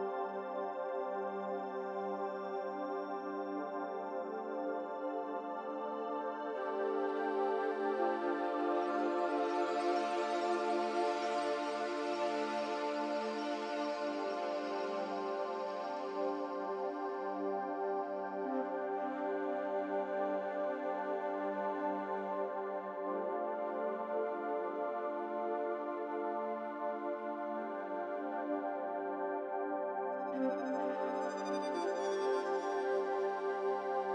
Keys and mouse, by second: 0.2 middle click, 0.3-1.5 drag, 2.4 g, 3.5 g, 12.2 ctrl+shift+KP_Subtract, 14.1-17.5 middle drag, 18.4 Tab, 19.9 3, 21.1-23.4 middle drag, 28.2-30.7 drag, 31.2-34.1 drag.